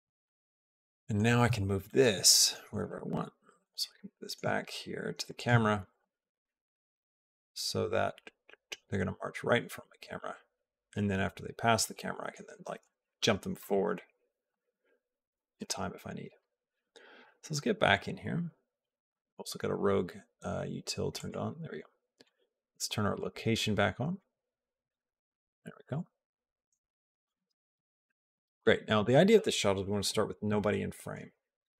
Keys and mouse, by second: 0.0-1.1 shift+middle drag, 1.6 shift+middle click, 2.1 middle click, 2.5 middle click, 2.9 g, 3.6 shift+middle click, 5.4 shift+middle click, 5.8 g, 7.1-12.1 drag, 11.7 shift+middle click, 12.8 g, 14.3 g, 15.5 middle click, 17.0 KP_0, 20.9 click, 25.8-27.1 drag, 27.2 space, 28.5 click, 28.5 space.